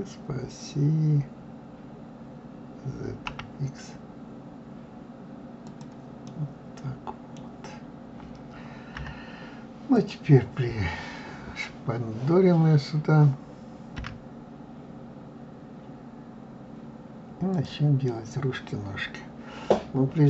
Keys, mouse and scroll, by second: 6.2-9.0 middle drag, 9.0 KP_3, 9.9 click, 13.9 g, 18.1-20.2 middle drag.